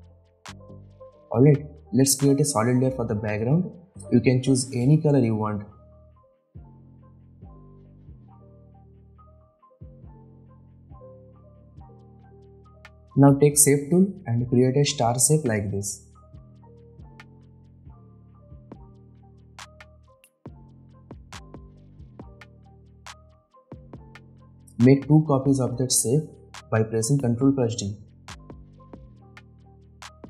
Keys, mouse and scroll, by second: 1.1 right click, 1.8 click, 4.0-4.9 typing, 6.5 click, 9.2 right click, 10.0 alt+click, 16.6-19.0 drag, 19.0 v, 19.2-20.8 drag, 23.6 s, 24.6 click, 25.9 ctrl+d, 27.3-28.3 drag, 28.8 ctrl+d, 29.5-30.2 drag.